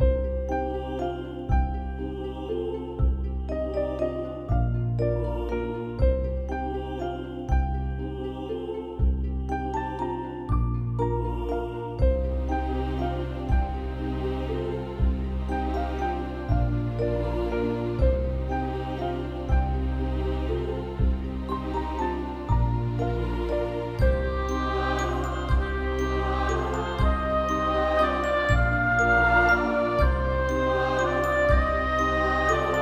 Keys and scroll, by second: 0.6 [, 1.3 ctrl+0, 5.3 ctrl+v, 7.0 ctrl+alt+BackSpace, 8.4 ctrl+=, 8.5 ctrl+=, 8.5 ctrl+=, 8.7 ctrl+=, 8.9 space, 10.9 x, 16.2 space, 22.1 x, 24.9 ctrl+0, 27.7 ctrl+v, 29.1 ctrl+BackSpace, 30.6 ctrl+=, 30.8 ctrl+=, 31.2 space, 32.2 ctrl+=.